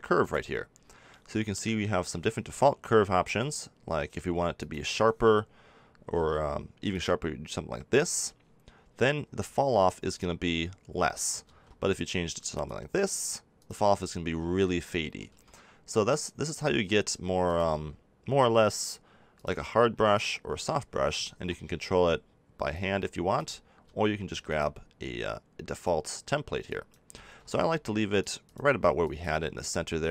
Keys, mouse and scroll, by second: 0.2-8.8 drag, 9.8-16.0 drag, 11.4 ctrl+z, 16.0 ctrl+z, 21.2 ctrl+z, 23.8 ctrl+z, 27.2 ctrl+z.